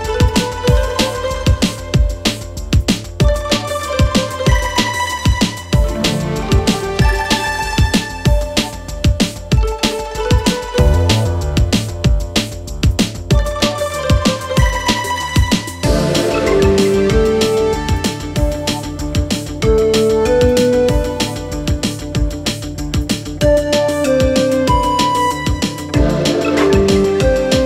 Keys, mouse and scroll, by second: 14.5 Return, 18.7 click, 23.3 click, 25.7 click.